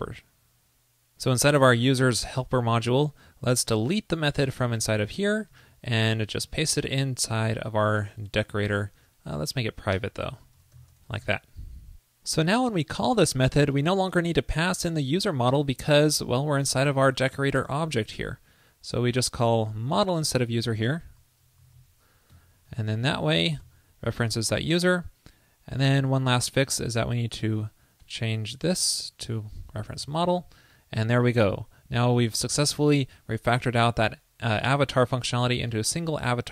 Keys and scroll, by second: 5.3 super+x, 5.5 super+s, 8.4 super+v, 11.3 super+s, 20.7 alt+Left, 22.8 alt+shift+Left, 30.5 super+Left, 32.2 super+Up, 32.2 super+s.